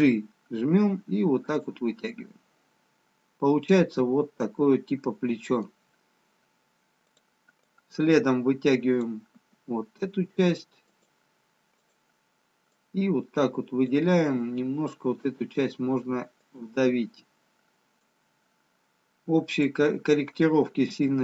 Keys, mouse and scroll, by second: 2.5 middle click, 7.2 click, 7.5 click, 11.8 click, 11.8 g, 13.0 click, 14.9 g, 18.2 click, 21.1 g.